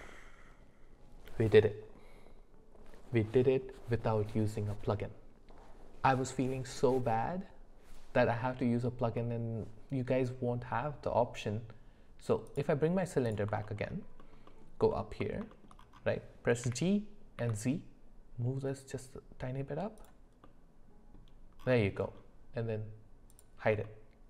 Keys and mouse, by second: 9.2-10.2 middle drag, 12.5 click, 14.9 alt+middle click, 15.5 shift+middle click, 16.7 g, 20.4 middle click, 22.0 middle click, 23.3 click, 23.8-24.2 middle drag.